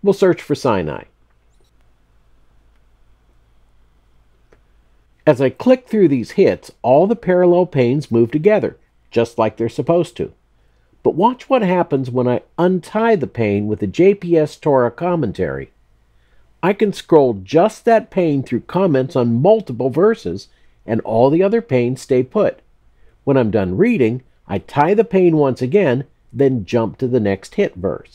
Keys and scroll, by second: 1.5-2.8 typing, 2.9 Return.